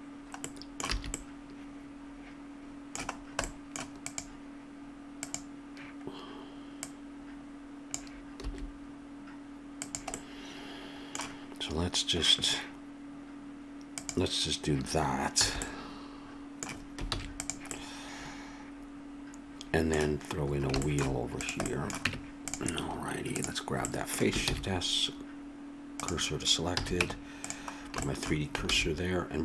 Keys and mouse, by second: 0.0-0.9 typing, 4.0-8.4 drag, 8.4 s, 8.7-10.1 middle drag, 15.3 a, 15.6 click, 17.1 ctrl+s, 20.8-22.0 middle drag, 22.0-23.3 drag, 22.0 Tab, 24.0-25.2 drag, 24.4 shift+s, 26.7 a, 27.0 Tab, 28.7 shift+a.